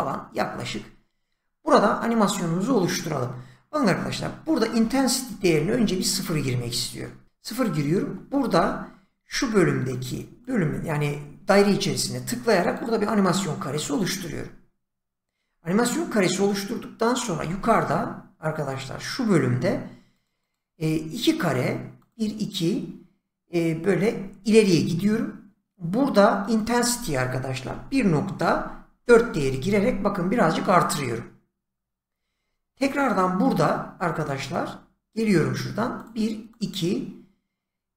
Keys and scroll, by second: 5.4 0, 5.6 Return, 8.5 <, 17.4 <, 20.6 <, 27.7-29.4 typing.